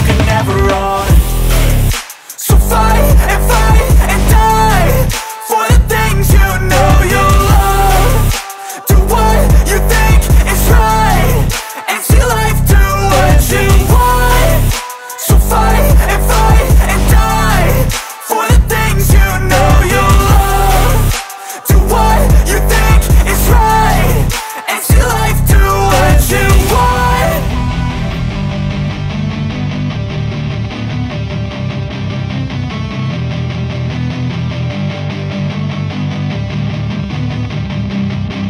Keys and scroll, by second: 0.9 Return, 1.5 p, 2.5 space, 6.0 l, 7.7 Return, 9.7 space, 10.1 p, 11.2 Return, 11.6 space, 12.0 m, 13.2 Return, 14.9 m, 16.6 space, 17.2 p, 18.9 space, 19.6 l, 23.1 space, 23.5 p, 25.6 space, 27.4 space, 29.1 r, 31.9 Return, 34.5 space, 36.1 m, 38.1 space.